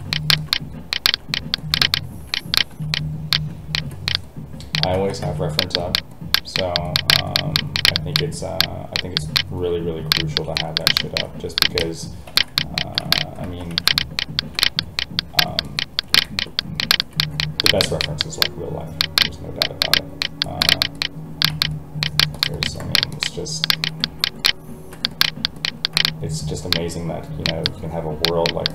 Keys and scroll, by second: 4.9 ctrl+z, 5.2 alt+a, 13.4 ctrl+z.